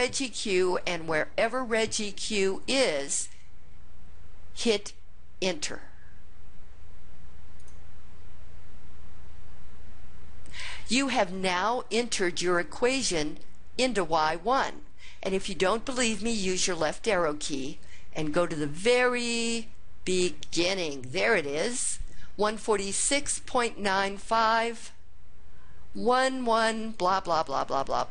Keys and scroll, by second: 7.6 Return, 16.8 (, 25.9-27.8 typing.